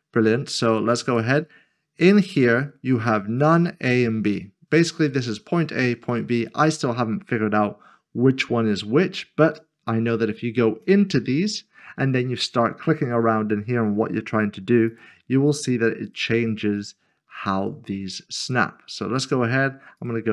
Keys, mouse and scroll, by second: 10.8 click, 12.0-13.0 scroll down 1, 14.9 click.